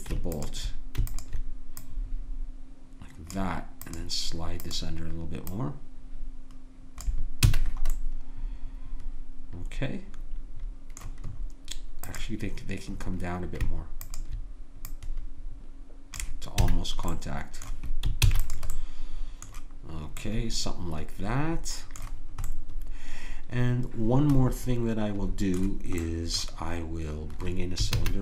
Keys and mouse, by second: 0.3-7.5 drag, 7.5 a, 8.2-9.9 middle drag, 11.4 middle click, 12.0-16.8 drag, 16.7 a, 17.1 middle click, 18.2 ctrl+s, 24.4 click, 26.0-28.0 drag, 28.0 shift+a.